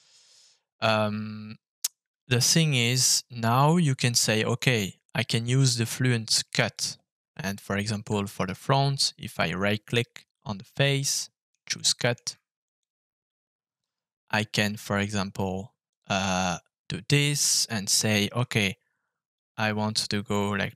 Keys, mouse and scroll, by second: 7.3 middle click, 8.3 right click, 9.3-10.1 scroll down 2, 11.1 middle click, 11.7 shift+middle click, 12.8 click, 15.8 click, 18.1 shift+click.